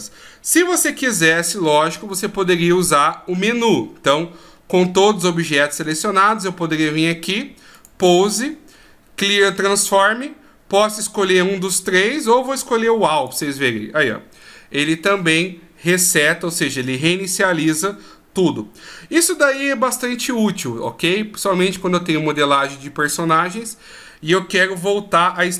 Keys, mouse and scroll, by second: 1.4 ctrl+z, 1.9 ctrl+z, 4.6-5.2 scroll down 1, 5.9 scroll down 1, 7.7 click.